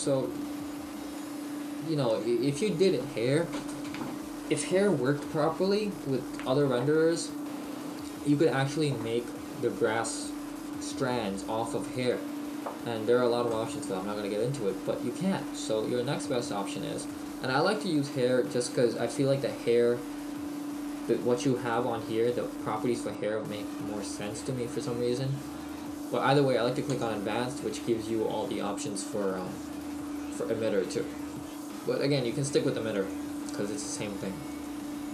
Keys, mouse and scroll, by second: 0.0 scroll up 1, 0.4 shift+middle click, 26.9 click, 32.7 click.